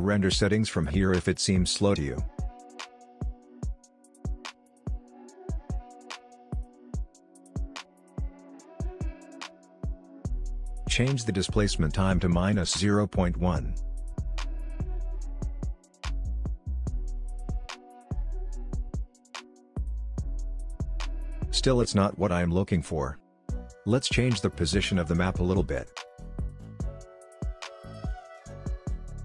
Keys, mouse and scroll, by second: 0.4 click, 2.8 space, 7.7 space, 8.3-11.3 drag, 18.8 Return, 20.3 click, 21.4 space, 23.1-29.2 drag.